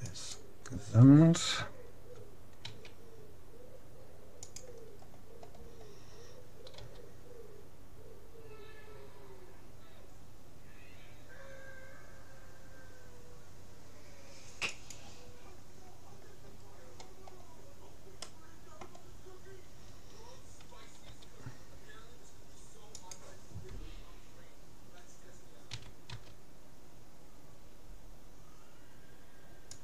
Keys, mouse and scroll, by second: 2.7 s, 5.0-7.2 middle drag, 6.7 g, 16.8-20.0 middle drag, 21.0 g, 25.7 s.